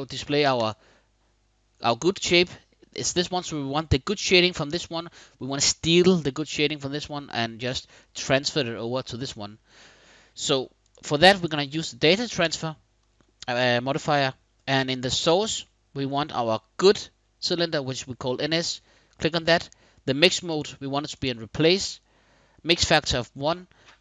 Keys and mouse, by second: 0.3 click, 7.8 click, 8.2 click, 11.0-12.2 drag, 15.2-18.5 drag, 20.1 middle click, 23.9-24.0 middle drag.